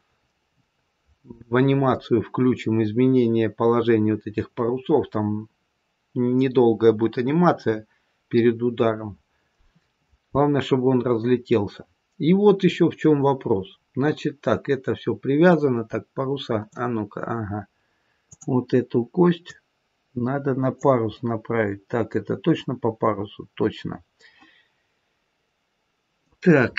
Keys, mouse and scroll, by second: 10.6-12.6 scroll down 1, 15.3 middle click, 15.3 scroll down 1, 18.2 click, 19.4 click, 21.0 middle click.